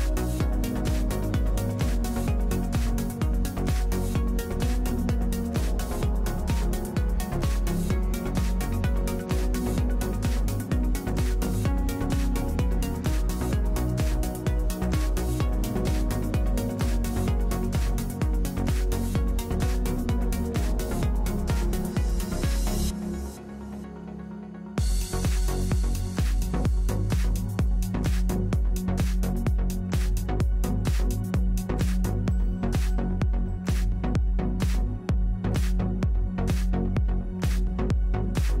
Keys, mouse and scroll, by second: 0.6 w, 10.3-11.7 middle drag, 11.0 f, 11.8 click, 14.5-17.9 drag, 21.6 ctrl+z, 25.0-28.7 middle drag, 29.1 Tab, 30.3 l, 32.2 l.